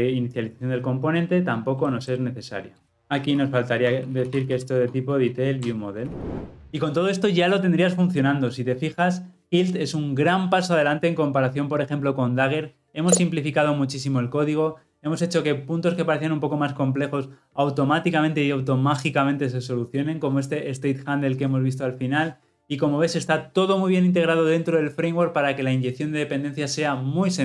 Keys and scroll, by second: 5.7 Return, 6.0 ctrl+alt+l, 6.2 ctrl+alt+o.